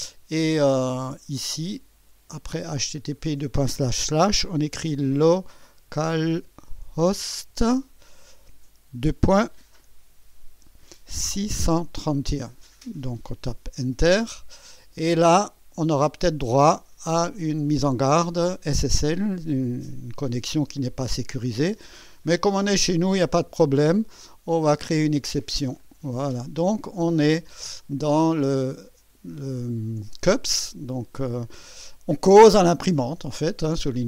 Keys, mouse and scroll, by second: 0.9 click, 1.4-3.1 drag, 4.8-8.3 typing, 11.4 6, 12.0 1, 13.9 Return, 25.9 click, 28.4-28.7 ctrl+scroll up 2, 29.1 ctrl+scroll up 2.